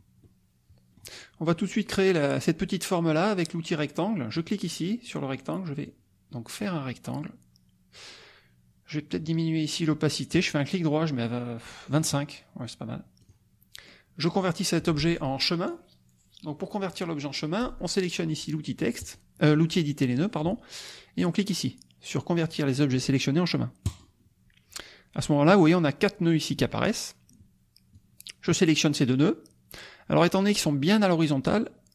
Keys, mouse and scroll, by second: 0.2 click, 4.3 click, 5.8-8.1 drag, 10.3 right click, 11.9 click, 13.2 click, 14.3 click, 19.0 click, 23.9 click, 27.9 click.